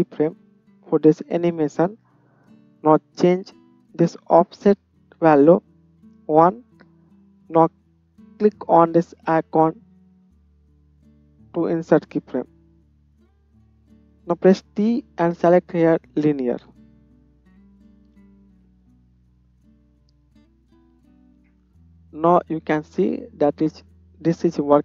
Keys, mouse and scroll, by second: 9.3-17.4 middle drag, 14.6 t, 17.4-24.8 drag, 17.9 space.